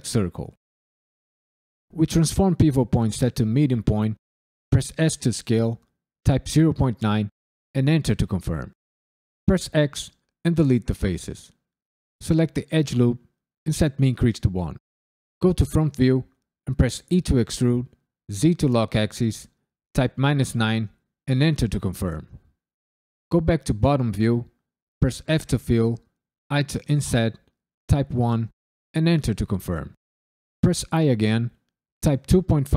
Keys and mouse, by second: 1.9-3.4 drag, 4.9 s, 6.2 KP_Decimal, 6.4 KP_9, 7.7 KP_Enter, 9.4 x, 12.6 alt+click, 13.6 shift+e, 14.1 KP_1, 14.5 KP_Enter, 16.0 KP_1, 17.1 e, 18.3 z, 19.9 KP_Subtract, 20.1 KP_9, 21.2 KP_Enter, 23.3 KP_7, 23.6 KP_9, 25.0 f, 26.5 i, 27.8 KP_1, 28.9 KP_Enter, 30.6 i, 32.0 KP_2, 32.2 KP_Decimal, 32.5 KP_5.